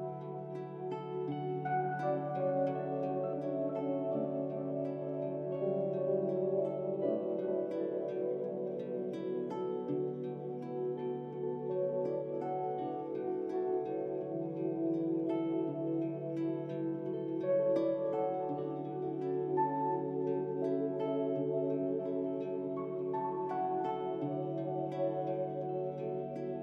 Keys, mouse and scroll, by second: 0.3 alt+shift+click, 4.3-7.3 drag, 8.6-12.3 drag.